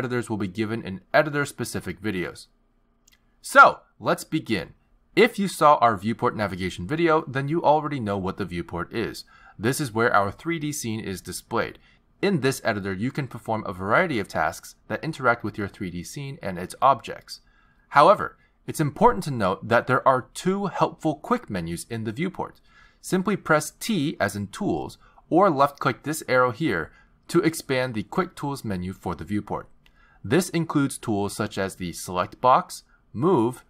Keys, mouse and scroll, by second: 12.6 click, 14.0 click, 15.0 click, 15.9 click, 24.3 t, 26.6 t, 28.9 click.